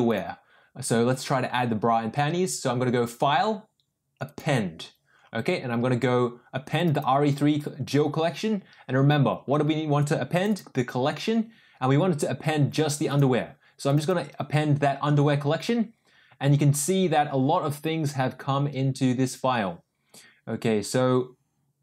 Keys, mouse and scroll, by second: 0.1-4.4 drag.